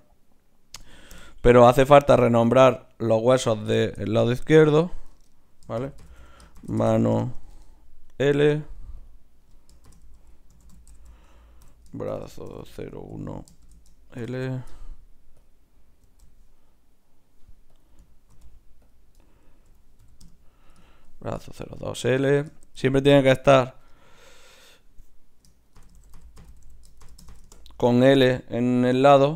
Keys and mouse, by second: 2.8 right click, 3.4-6.1 middle drag, 4.4 click, 4.4 right click, 8.1 right click, 9.0-13.5 middle drag, 15.4-17.0 drag, 17.0-18.6 middle drag, 18.6-21.0 drag, 21.0-23.5 middle drag, 23.5-28.9 drag, 28.9 z.